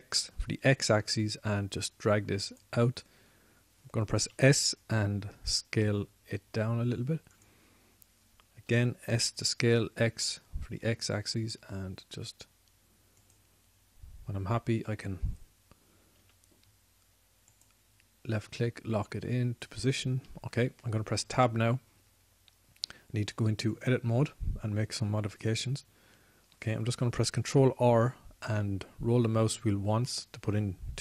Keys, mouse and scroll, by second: 0.2 s, 4.2-5.5 drag, 5.5 s, 8.8-10.6 drag, 17.6 s, 21.6 Tab, 28.7 ctrl+r.